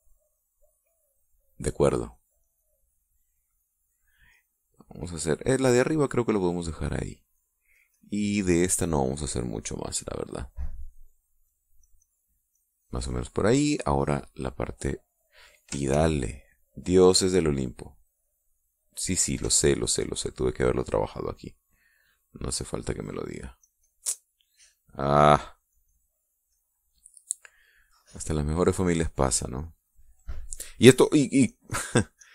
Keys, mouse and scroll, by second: 2.6-3.8 drag, 3.9 click, 5.1-6.4 middle drag, 6.4 middle click, 7.5 click, 8.5-9.5 drag, 12.2 click, 12.6 click, 13.3 click, 16.7 ctrl+z, 21.2 click, 23.4 click, 24.4-27.6 drag, 27.6 middle click, 29.6-31.3 drag, 31.8-32.3 drag.